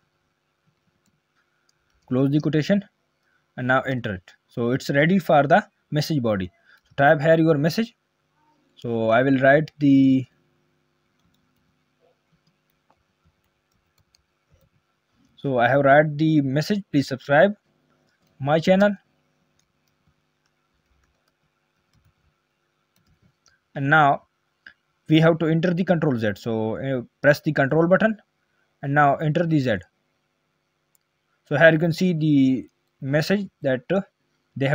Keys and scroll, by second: 29.6 ctrl+z.